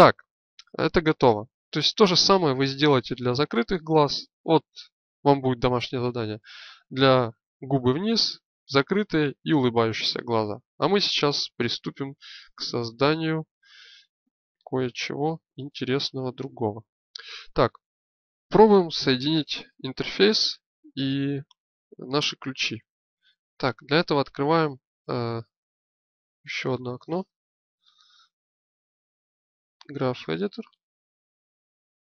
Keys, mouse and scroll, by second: 0.4 KP_1, 15.2 right click, 16.0 click, 23.0 alt+Tab, 26.5 click, 27.1 click, 31.2-32.0 drag.